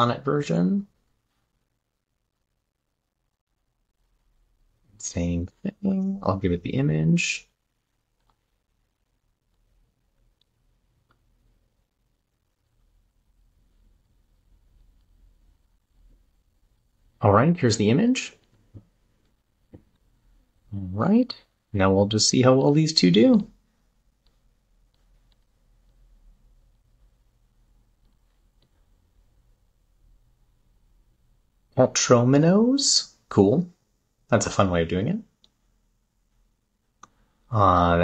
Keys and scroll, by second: 0.7 super+`, 5.9 super+`, 19.0 super+v, 20.4 super+`.